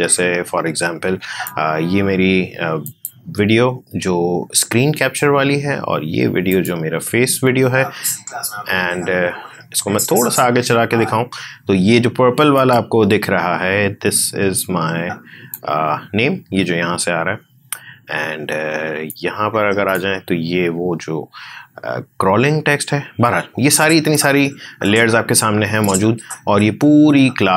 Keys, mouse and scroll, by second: 6.4 click, 7.4 space, 11.2 space, 12.5-18.3 drag, 19.0-22.2 drag, 23.2-27.5 drag.